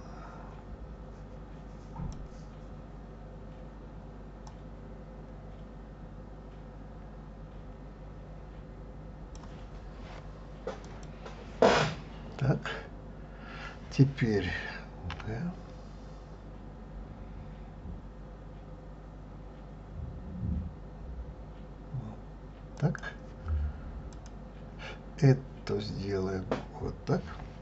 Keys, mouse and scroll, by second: 4.5-7.5 drag, 10.9 click, 15.1 g, 24.1 click.